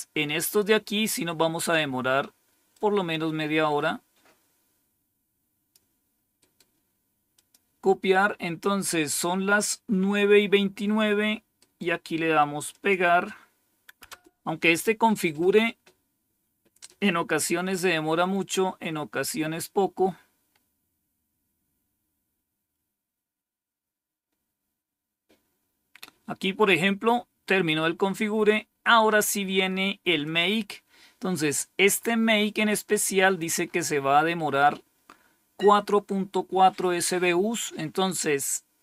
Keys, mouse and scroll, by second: 0.1 scroll down 2, 2.6-5.6 drag, 6.3 right click, 7.2 click, 11.5 right click, 12.6 click, 13.9 Return, 23.5-25.4 scroll down 4, 27.6-29.1 scroll down 5, 30.1 click, 30.7 click.